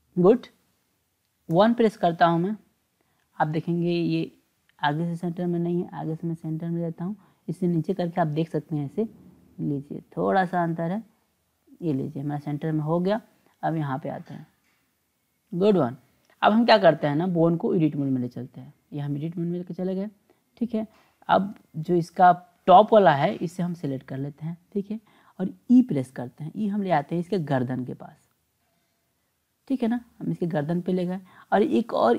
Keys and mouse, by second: 1.5 KP_1, 4.8-6.8 drag, 8.3-9.6 drag, 10.7-11.8 drag, 13.1-15.5 drag, 17.3-18.9 drag, 23.3 click, 25.8 e.